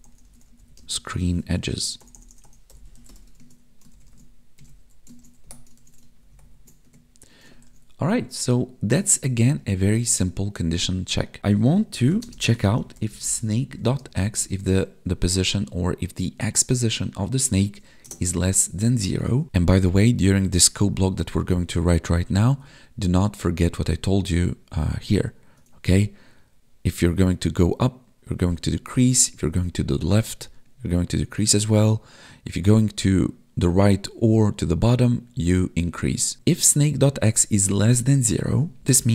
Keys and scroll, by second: 0.8 space, 3.9 ctrl+Left, 4.6 Right, 5.2 ctrl+s, 5.4 Down, 5.8 ctrl+s, 6.3 ctrl+Down, 6.8 Tab, 7.7 ctrl+s, 12.2 space, 14.0 space, 14.4 space, 18.7 Right, 19.4 Tab, 22.6 Tab.